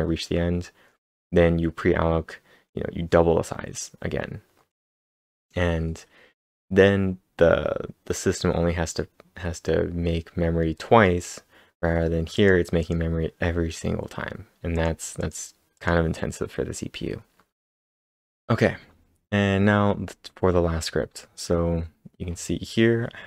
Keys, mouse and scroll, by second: 12.3 click, 12.8 click, 14.8 click, 15.5-16.3 typing, 15.8 click, 17.3 scroll down 3, 17.9 scroll up 3, 17.9 ctrl+l, 17.9 ctrl+`, 17.9 ctrl+s, 17.9 ctrl+/.